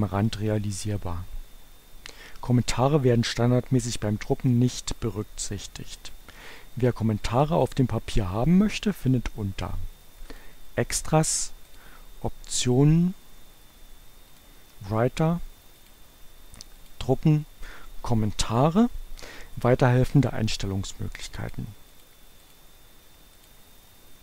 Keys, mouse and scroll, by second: 10.3 click, 11.7 click, 14.0 click, 15.8 click, 16.7 click, 21.5 click, 22.5 click, 23.5 click.